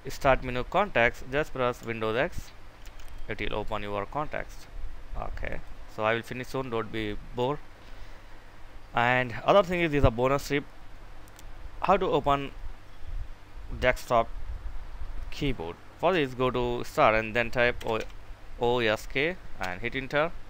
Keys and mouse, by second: 2.5 super+x, 5.3 click, 17.3-18.3 typing, 19.3 Return.